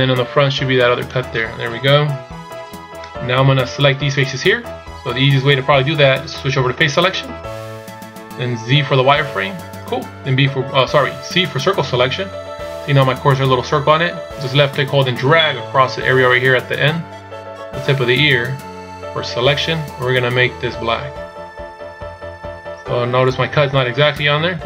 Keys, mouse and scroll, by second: 1.8 KP_1, 7.2 click, 9.4 z, 11.8 c.